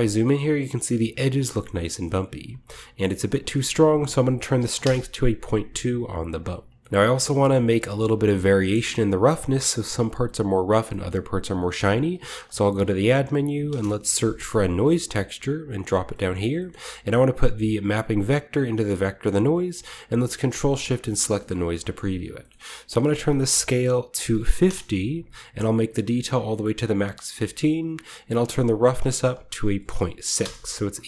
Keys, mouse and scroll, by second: 0.2-1.2 shift+middle drag, 1.3-2.3 scroll up 1, 1.4-3.3 middle drag, 2.3-3.3 scroll up 1, 3.3 click, 4.6 typing, 4.7 Return, 5.9-7.1 drag, 6.3-6.9 scroll down 1, 6.7-8.5 middle drag, 6.9 ctrl+s, 6.9 scroll up 1, 7.0 scroll down 1, 7.1 typing, 8.0-10.1 scroll down 1, 8.8-10.1 middle drag, 10.1 scroll down 1, 11.0-11.9 middle drag, 11.3-12.7 scroll up 2, 11.7-13.0 typing, 12.0 shift+click, 12.7-13.2 shift+scroll up 1, 13.6 Return, 15.6 click, 17.2 click, 17.9 click, 19.2 click, 20.1 ctrl+shift+click, 20.3 typing, 20.7-21.3 scroll down 1, 21.3-24.2 middle drag, 21.4-21.8 scroll up 1, 21.5-22.3 typing, 22.7-24.2 scroll up 1, 22.9-24.6 drag, 24.0-24.7 typing, 25.7 typing, 26.3-30.7 drag, 29.8-31.0 typing.